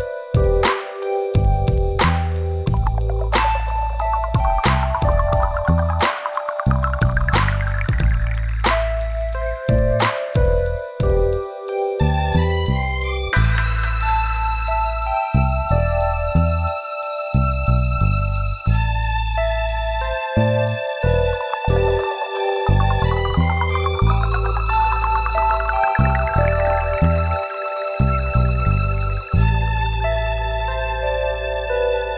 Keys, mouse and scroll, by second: 4.6 click, 4.7 click, 5.6 click, 5.7 click, 9.1 scroll up 1, 10.6 click, 10.7 click, 18.1 click, 18.3 click, 20.8 click, 22.0 right click, 23.1 click, 23.1 click, 24.0 click, 24.3 click, 24.4 double click, 25.0 scroll up 2, 25.6 click, 26.9 click, 29.0 click, 29.1 click, 29.8 scroll down 2, 30.0 click, 30.5 scroll down 1, 32.0 scroll up 1.